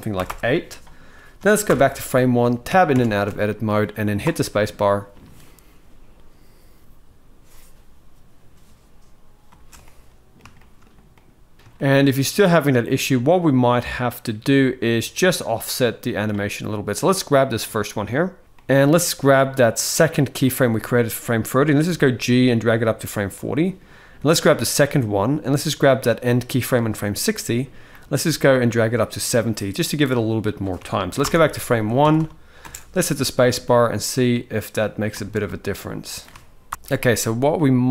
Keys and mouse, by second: 1.4 shift+Left, 2.4 Tab, 2.7 Tab, 3.1-3.4 shift+middle drag, 4.0 space, 9.2 space, 9.6-10.1 middle drag, 10.3-11.8 shift+middle drag, 11.5 shift+space, 13.0 middle click, 15.2-16.0 drag, 17.5 shift+middle drag, 18.4 middle click, 20.2 click, 21.7 g, 24.1 click, 25.3-26.2 drag, 27.7 g, 31.0 shift+Left, 31.5 click, 31.7 Tab, 31.9 Tab, 32.4 space, 34.9 space, 35.2-35.9 middle drag, 36.4 shift+Left, 37.3 middle click.